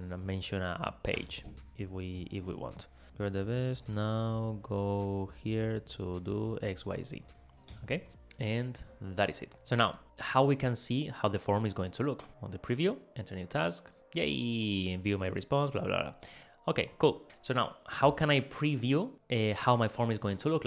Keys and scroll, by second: 0.7 Down, 1.2 Return, 3.0 alt+Left.